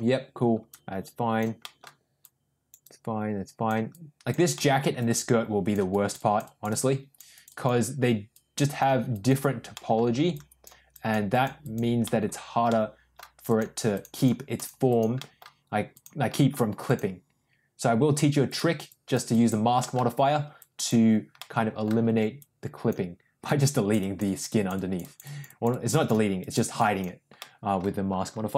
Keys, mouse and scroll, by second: 0.6 click, 1.5 middle click, 2.1 click, 2.8 click, 3.8 click, 4.5 middle click, 4.9 click, 5.8 click, 7.3 click, 8.2 click, 9.0 click, 9.6 middle click, 10.2 click, 10.8 click, 11.2 click, 11.5 click, 12.0 middle click, 12.6 middle click, 13.4 click, 13.8 click, 14.1 click, 14.5 click, 14.8 click, 15.1 middle click, 15.8 click, 16.3 middle click, 16.8 click, 18.4 click, 18.8 click, 19.3 click, 19.7 middle click, 20.5 click, 21.3 middle click, 22.3 click, 23.4-24.4 drag, 24.4 click, 26.3 click, 27.3 middle click.